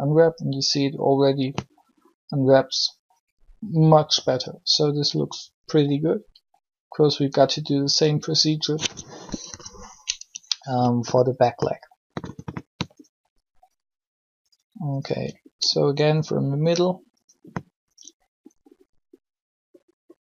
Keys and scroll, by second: 9.3 3.